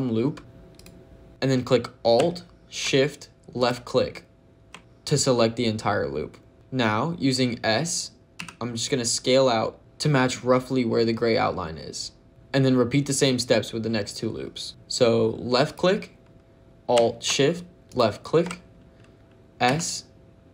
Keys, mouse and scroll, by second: 0.6 click, 3.5 alt+shift+click, 6.5 ctrl+z, 6.5 click, 6.5 s, 8.2 s, 9.8 click, 14.7 click, 15.5 click, 17.8 alt+shift+click, 19.5 s.